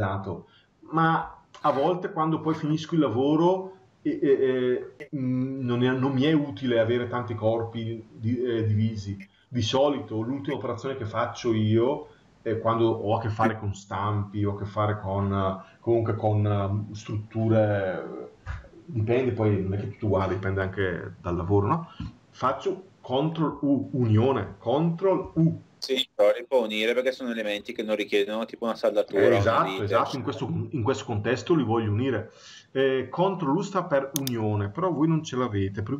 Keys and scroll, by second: 25.0 ctrl+u, 27.3 Escape.